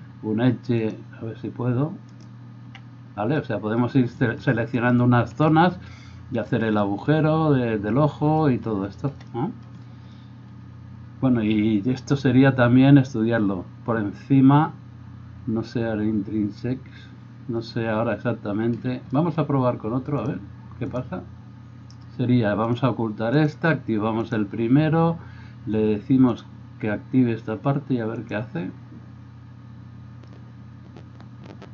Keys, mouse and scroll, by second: 22.9 middle click, 23.3 click, 23.6-28.3 middle drag, 28.3-31.7 drag.